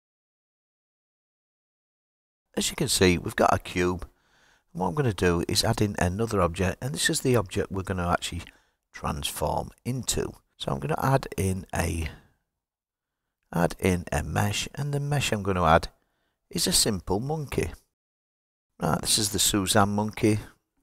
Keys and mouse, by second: 7.6-17.1 drag, 19.5 g.